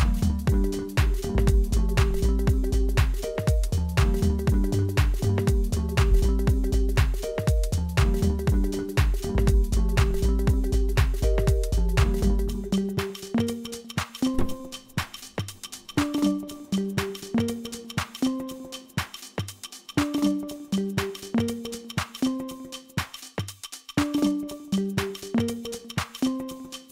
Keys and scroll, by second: 4.6 ctrl+b, 20.7 g, 21.2 l, 21.7 Return.